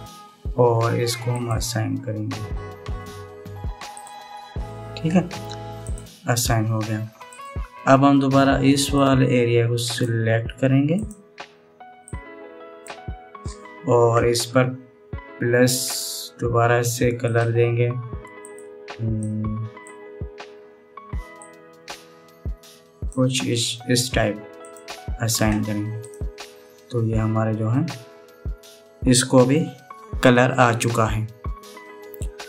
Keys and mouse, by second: 4.6 click, 6.5 click, 9.7-10.7 drag, 11.6 click, 12.8 right click, 16.6 right click, 17.9 right click, 19.1 right click, 26.7 right click, 28.3-29.8 middle drag, 31.7 middle click.